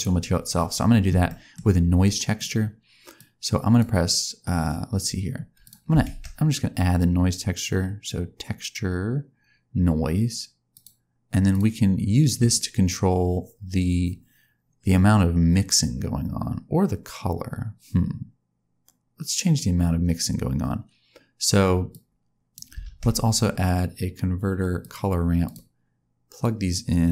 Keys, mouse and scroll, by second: 0.5-1.0 scroll down 1, 1.0-2.3 scroll down 3, 1.2 middle click, 2.3 click, 3.1 click, 5.6 click, 6.0 shift+a, 12.1-14.1 scroll up 2, 21.8 click, 22.8 shift+a, 26.3 click.